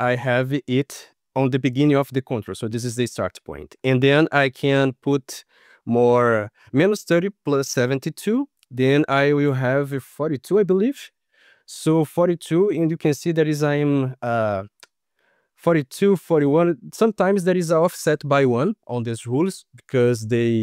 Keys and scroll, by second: 6.1 shift+Right, 10.6 ctrl+s.